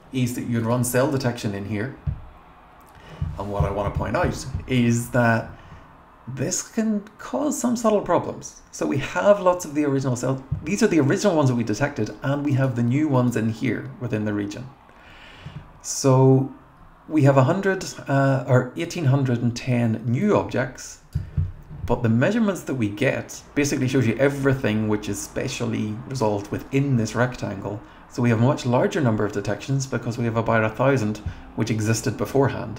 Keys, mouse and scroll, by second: 0.6 click, 12.5 click, 13.2 click, 20.2 click.